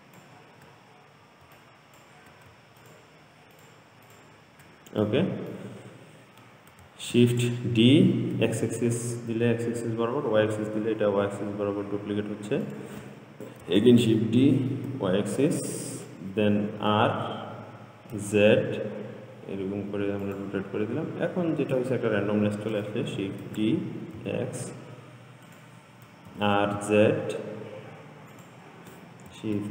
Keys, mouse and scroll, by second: 1.1-1.7 scroll down 2, 1.8 shift+drag, 3.0 shift+click, 3.8 shift+click, 4.3 shift+click, 5.3-7.4 middle drag, 7.4 shift+d, 14.1 shift+d, 17.0 r, 23.7 shift+d, 26.5 r.